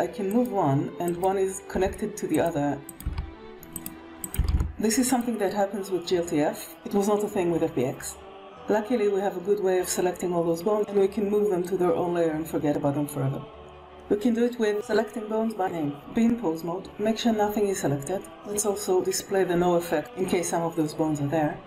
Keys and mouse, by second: 0.9 click, 1.6 g, 2.7 click, 2.9 g, 4.1 click, 4.3 g, 19.9 alt+a.